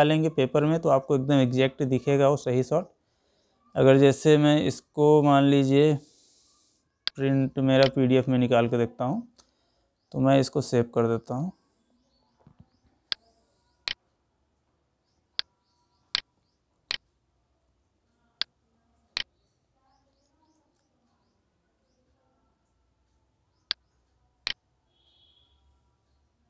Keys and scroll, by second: 1.6 Escape, 3.8 Escape.